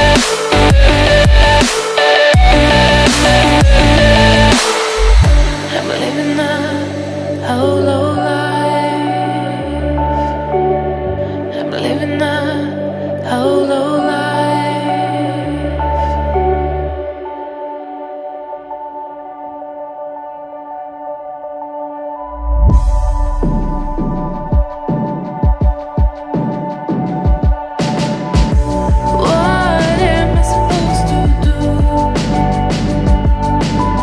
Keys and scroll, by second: 14.2 ctrl+j, 15.8 ctrl+j.